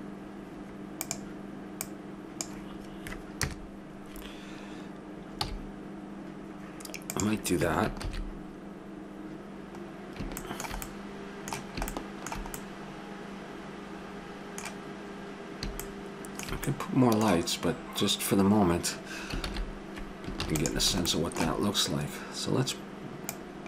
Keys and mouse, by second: 3.4 KP_0, 5.5 s, 8.3 shift+z, 12.3 middle click, 16.0-17.1 middle drag, 19.6 shift+z, 20.4 ctrl+s, 23.3 click.